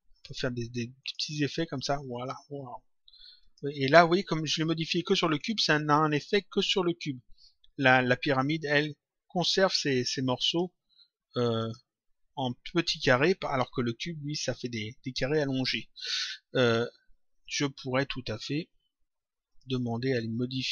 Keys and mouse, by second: 0.1 click, 3.3 click, 10.4 click, 11.5 click, 19.4 click.